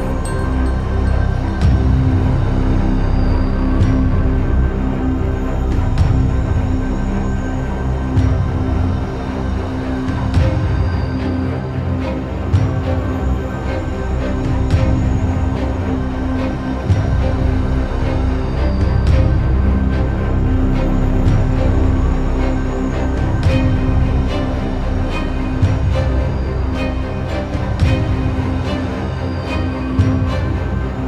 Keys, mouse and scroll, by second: 0.2 shift+middle click, 0.7 g, 5.2 shift+z, 5.5 click, 6.0 3, 6.2 click, 6.4-6.9 scroll down 2, 6.9 KP_3, 7.3 shift+middle click, 7.4 shift+scroll down 1, 8.0 e, 10.3-10.7 scroll up 2, 10.7 shift+middle click, 10.9 scroll up 1, 11.1 middle click, 11.8-12.3 scroll down 1, 12.3 click, 13.3 2, 13.4 click, 14.0 KP_3, 14.6 g, 18.3 middle click, 18.8 click, 19.3 KP_3, 20.1 g, 22.2-22.5 scroll down 3, 22.5 shift+middle click, 23.0 click, 23.5 click, 23.9 3, 24.0 click, 24.2-25.2 middle drag, 25.2 i, 26.1 KP_1, 26.4 scroll down 3, 26.6 shift+middle click, 26.9-27.4 scroll up 2, 27.4 ctrl+z, 28.3 e.